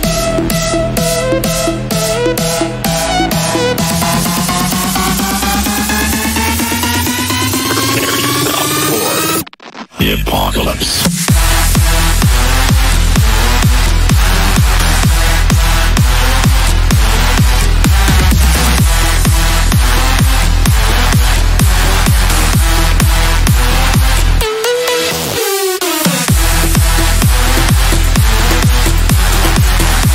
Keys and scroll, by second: 27.0 F3.